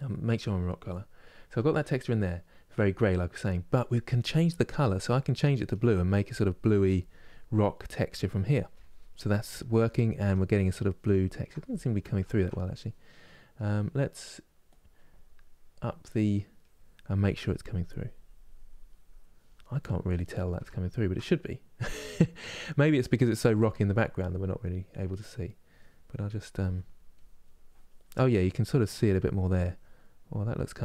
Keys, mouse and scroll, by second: 0.0-0.9 scroll down 1, 4.7-8.9 drag, 9.4-12.0 ctrl+middle drag, 12.0 ctrl+z, 14.1 middle click, 14.3-19.4 drag, 19.4-20.4 middle drag, 20.4 ctrl+z, 24.5-26.3 drag, 26.3 f, 26.8-29.6 drag, 29.6-30.8 middle drag.